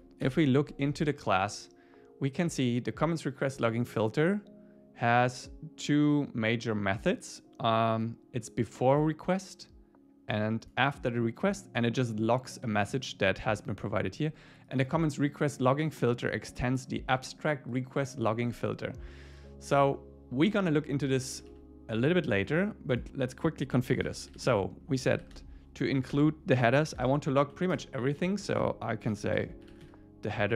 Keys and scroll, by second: 0.3 super+b, 21.5 super+w, 26.1 Return, 27.4 Right, 27.7 Return.